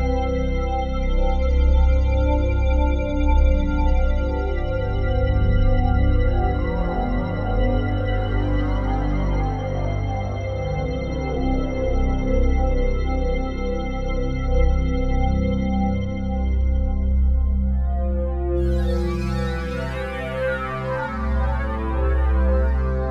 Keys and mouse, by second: 0.7 click, 3.8 click, 6.0 click, 7.4 click, 8.5 click, 9.6 click, 12.6 click, 14.1 ctrl+alt+click, 14.6 alt+shift+click, 15.1 ctrl+alt+click, 16.2-17.8 drag, 18.7-23.1 ctrl+alt+drag.